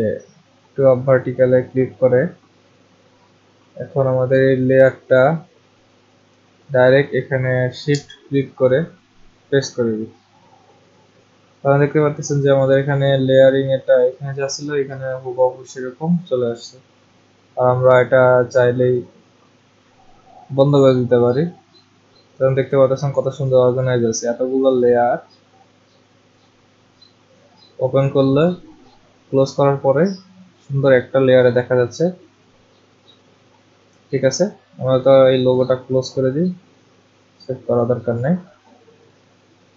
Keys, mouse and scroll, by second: 1.2 click, 7.9 click, 8.6 shift+click, 18.8-24.0 drag, 24.9 click, 28.4 click, 35.6 click, 37.6 click.